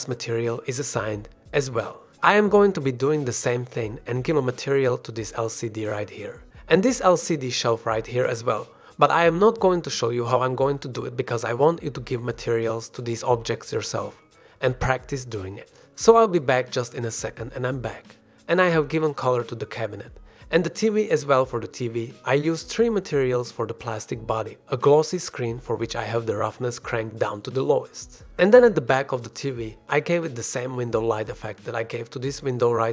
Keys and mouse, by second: 0.6 click, 2.6 shift+middle drag, 2.9 click, 3.4 shift+click, 3.7 click, 7.0 g, 7.9-8.7 drag, 8.9 g, 10.8 drag, 11.1 shift+drag, 19.6 g, 20.8 g, 21.1-21.6 drag, 21.7 shift+drag, 23.3 drag, 24.9 click, 26.1 shift+middle drag, 26.9-27.5 middle drag, 28.5-29.6 middle drag, 31.0 /, 31.2-31.6 middle drag, 31.9-32.3 middle drag.